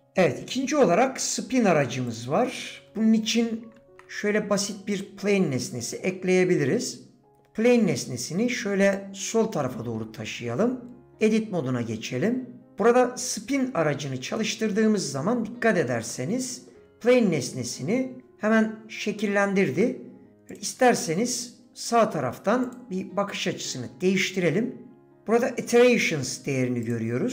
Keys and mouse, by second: 4.7 shift+a, 8.7 g, 9.6-10.0 shift+middle drag, 10.6 Tab, 14.4-15.6 middle drag, 16.1 middle click, 24.2-24.6 drag, 26.8 click.